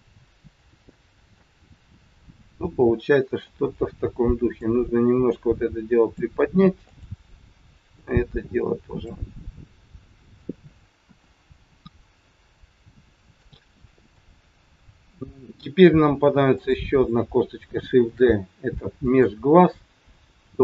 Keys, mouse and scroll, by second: 1.5 middle click, 3.7 click, 5.3 click, 6.8 click, 8.0 click, 9.7 middle click, 11.1 KP_1, 11.7-12.1 scroll down 2, 12.7 scroll down 1, 13.5 shift+middle click, 16.5 click, 18.1 shift+d.